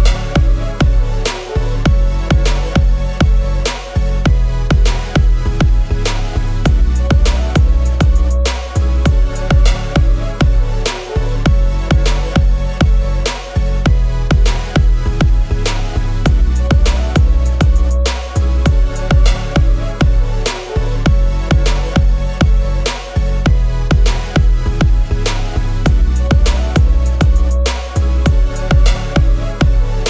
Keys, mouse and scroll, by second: 0.6-3.3 scroll up 1, 9.1-9.9 scroll, 9.9-10.3 scroll, 10.3-11.1 scroll up 1, 11.1-11.7 scroll, 12.7 alt+click, 16.9 alt+click, 21.2 BackSpace, 26.7 double click.